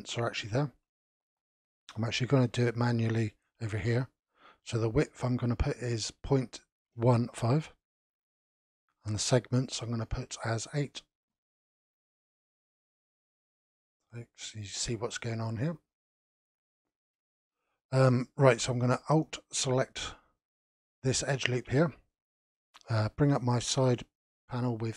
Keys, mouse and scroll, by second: 3.4-6.4 drag, 9.4-11.5 drag, 12.7-13.7 middle drag, 13.7-14.2 scroll up 1, 14.2 shift+middle click, 14.8-15.6 scroll up 3, 15.6-16.1 scroll down 2, 16.1-17.3 middle drag, 17.3-19.7 scroll down 3, 19.7 alt+click, 22.1-24.3 middle drag, 24.3 n.